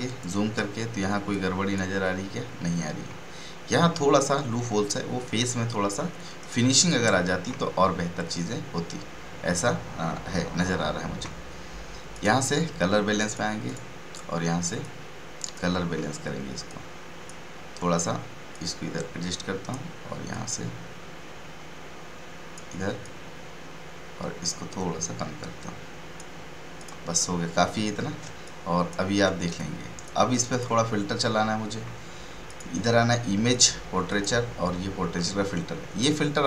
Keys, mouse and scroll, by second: 0.0 ctrl+space, 0.2 ctrl+space, 1.5 space, 3.3 space, 3.9 space, 6.3 space, 6.8 click, 7.1 space, 12.1-26.7 drag, 28.2 space, 28.4-30.3 ctrl+drag, 30.3 right click, 30.6 click.